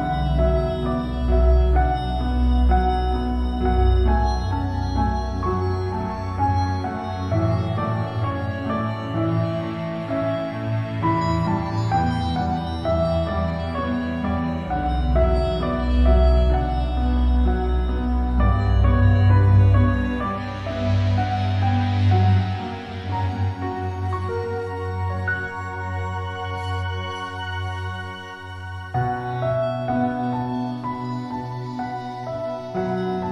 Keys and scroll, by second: 1.8 ctrl+space, 2.2 ctrl+space, 10.6 ctrl+-, 13.7 Delete, 22.0 Delete, 24.6 ctrl+space, 25.0 ctrl+space, 28.7 ctrl+y.